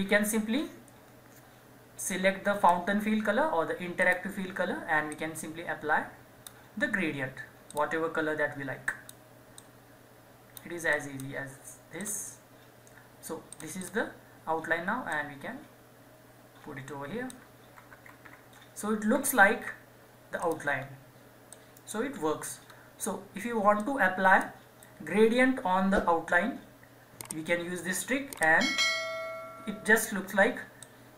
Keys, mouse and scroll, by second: 2.1-18.2 drag, 18.2 Down, 20.4 click, 20.8-21.1 scroll down 1, 21.5 click, 22.2-22.6 scroll down 1, 23.7-26.8 drag, 28.3 scroll down 1, 28.8-30.6 scroll, 30.6 scroll up 1, 30.8-31.1 drag.